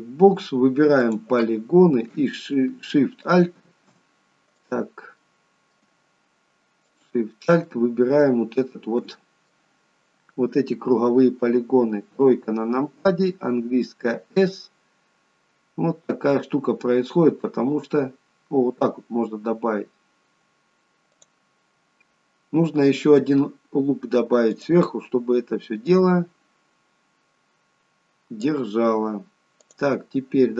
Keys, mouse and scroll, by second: 1.1 click, 3.3 alt+shift+click, 3.9 alt+shift+click, 4.6 click, 5.2 middle click, 6.9 alt+shift+click, 7.8 middle click, 12.2 KP_3, 14.3 s, 21.8-23.1 scroll up 2, 24.6 click, 26.0 click, 29.7 click.